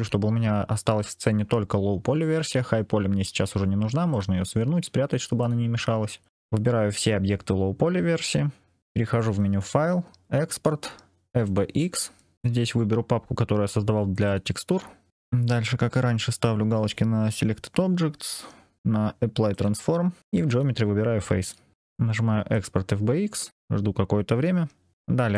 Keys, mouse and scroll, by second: 4.0 click, 5.3 click, 6.3 click, 6.8 shift+click, 9.1-11.6 drag.